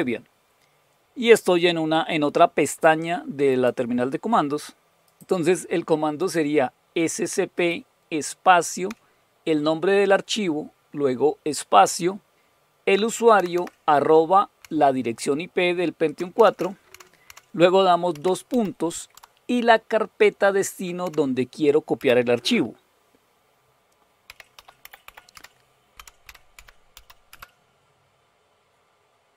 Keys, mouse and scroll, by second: 0.0-2.8 drag, 3.5 right click, 5.0 click, 6.2 right click, 7.5 click, 8.9-12.8 Left, 13.3 Right, 13.5 Right, 14.6 Delete, 15.1 Delete, 15.2-16.0 Delete, 16.9 Delete, 18.1-18.5 typing, 19.1 Tab, 21.0 Delete, 21.7-22.5 typing, 24.0-27.4 typing.